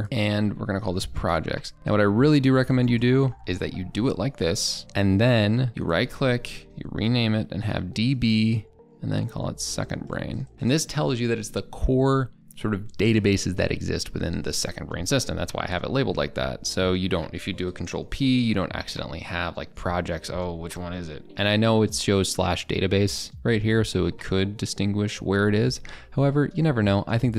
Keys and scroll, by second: 3.9 ctrl+[, 4.8 ctrl+[, 17.9 ctrl+p.